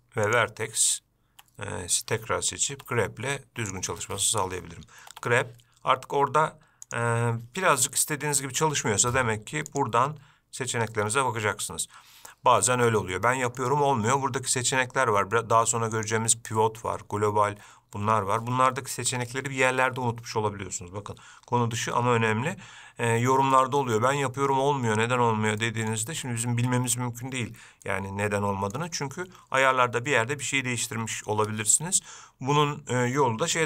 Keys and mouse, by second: 2.9 g, 5.3 g, 8.7 middle click, 9.9-11.2 drag, 12.9 middle click, 16.3-17.7 drag, 23.7 shift+middle click, 25.8 middle click, 28.1 shift+middle click.